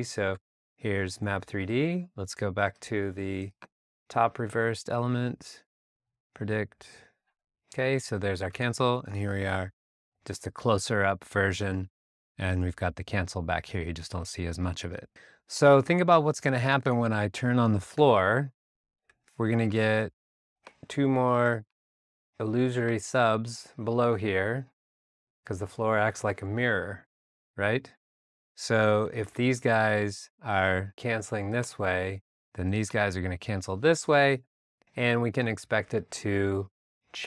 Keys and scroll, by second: 8.6 super+Tab, 19.1 r, 29.2 a.